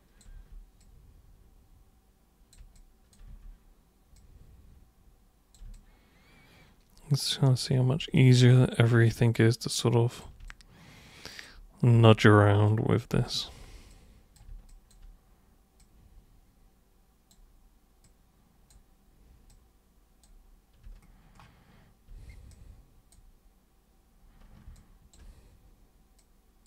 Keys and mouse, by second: 0.3 super+e, 0.8-2.5 super+drag, 2.7-3.1 alt+super+drag, 3.3 super+w, 4.1 super+click, 5.7-7.6 alt+super+drag, 8.0 super+e, 8.2 alt+super+click, 9.1 super+click, 10.5-11.4 alt+super+drag, 11.9 super+w, 12.7 super+click, 13.9-14.4 super+drag, 14.7 alt+super+click, 15.8 super+click, 18.0 super+click, 19.5 super+click, 22.5-23.1 super+drag, 24.7-25.1 ctrl+shift+super+drag, 26.2 super+click.